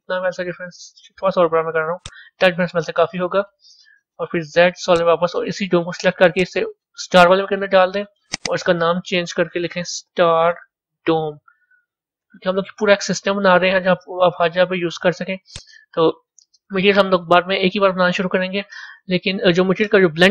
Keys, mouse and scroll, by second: 0.6 s, 2.6 scroll down 3, 4.2 z, 6.2 click, 8.2 click, 8.5-11.5 drag, 15.4 click, 16.7-19.7 middle drag.